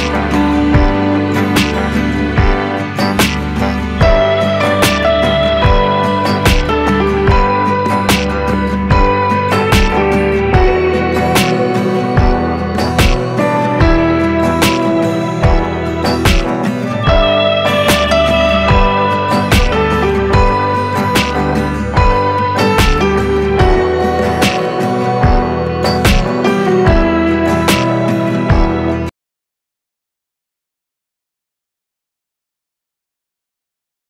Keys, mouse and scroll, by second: 23.5 ctrl+space, 24.8-27.3 drag, 27.3 Delete.